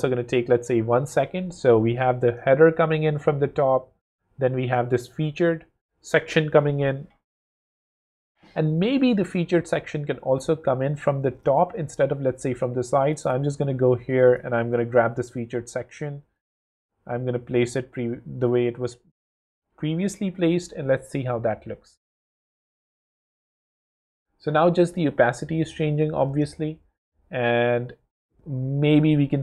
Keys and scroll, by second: 0.5 w, 20.2 w.